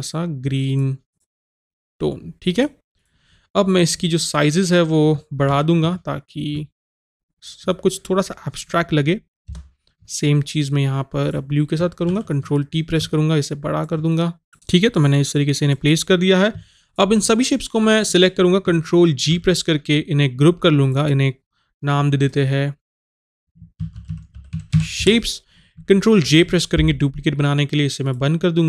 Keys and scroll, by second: 19.3 ctrl+g, 26.2 ctrl+j.